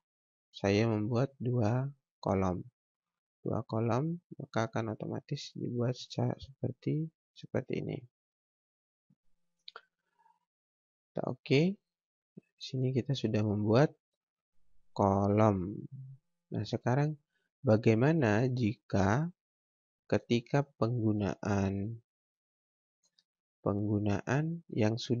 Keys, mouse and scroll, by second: 2.3 click, 6.8 click, 10.6 click, 12.7 scroll down 1, 13.0-13.7 scroll up 1, 16.5 click.